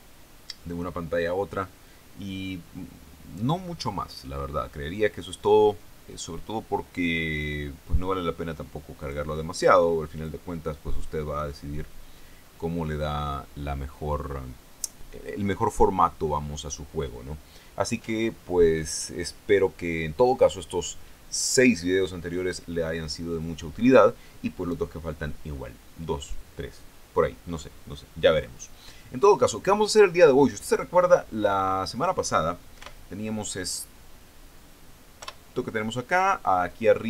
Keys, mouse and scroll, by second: 9.4 click, 10.6 click, 33.2 p, 35.6 p.